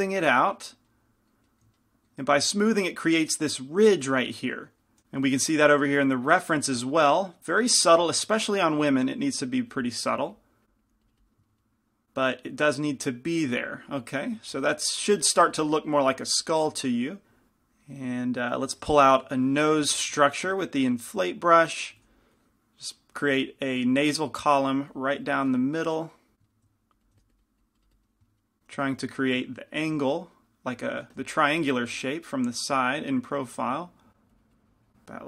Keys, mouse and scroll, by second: 0.5-8.0 middle drag, 5.0 f, 9.6-11.9 drag, 19.9 i, 19.9 f, 20.8 shift+f, 22.1 f, 22.5-29.0 drag, 27.2 f, 29.0 f, 31.2 f, 32.4 click, 32.6 middle click, 32.9 click, 33.2 click, 33.9 middle click, 34.2 middle click, 34.4-35.2 drag.